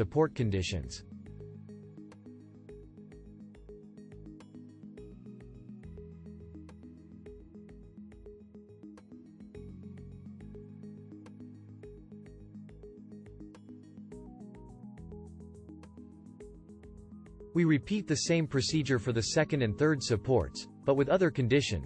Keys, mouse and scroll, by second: 18.9-21.0 alt+drag.